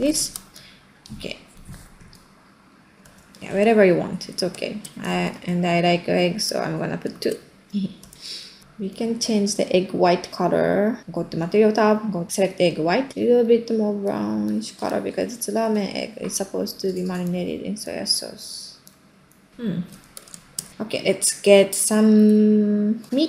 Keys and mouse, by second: 0.2 ctrl+middle click, 3.0 space, 3.7 middle click, 5.1 r, 6.7 middle click, 7.2-8.2 typing, 7.8 middle click, 8.2 middle click, 8.5-9.5 middle drag, 11.1 middle click, 12.8 middle click, 19.6 middle click, 19.9 ctrl+middle click, 20.3 shift+middle click, 22.4-22.9 ctrl+middle drag.